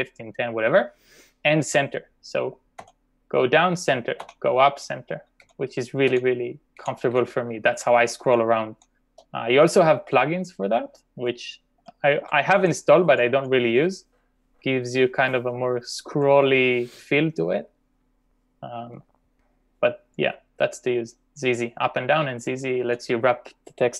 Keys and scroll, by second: 2.8 ctrl+j, 4.3 ctrl+k, 5.5 ctrl+j, 6.1 ctrl+k, 6.8 ctrl+j, 7.2 ctrl+k, 8.1 ctrl+k, 8.7 ctrl+j, 9.0 ctrl+j, 11.3 ctrl+u, 12.1 ctrl+u, 12.9 ctrl+u, 13.2 ctrl+u, 15.9 ctrl+d, 16.3 ctrl+u.